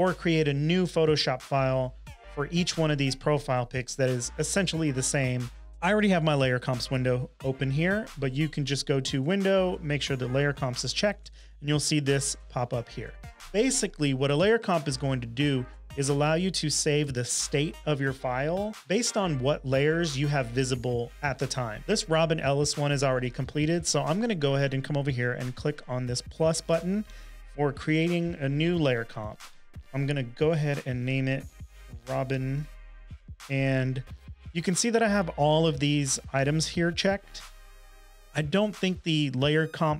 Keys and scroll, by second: 30.4-32.2 typing, 33.3 BackSpace.